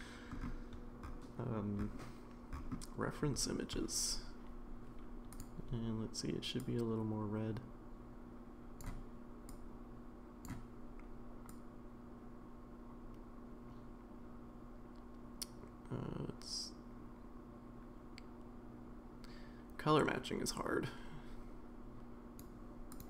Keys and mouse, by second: 5.3 click.